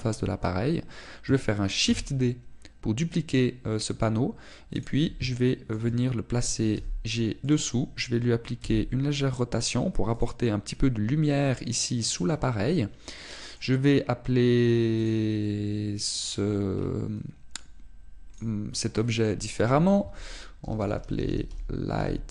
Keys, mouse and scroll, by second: 2.8 shift+d, 5.8 click, 6.3 shift+middle click, 7.7 g, 8.5 click, 9.6 r, 11.2 click, 14.1 middle click, 16.0 click.